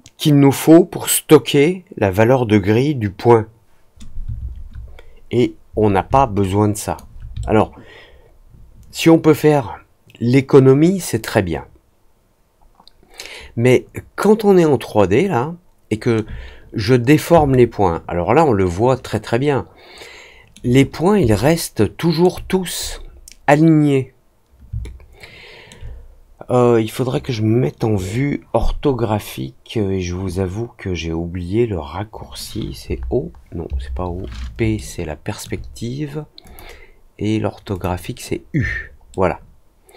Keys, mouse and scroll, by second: 6.3 alt+click, 7.3-16.1 alt+middle drag, 17.4-20.5 alt+middle drag, 21.3 alt+middle click, 24.8 alt+middle click, 34.7 alt+middle click, 36.4 click, 37.7 click, 39.0-39.9 alt+middle drag.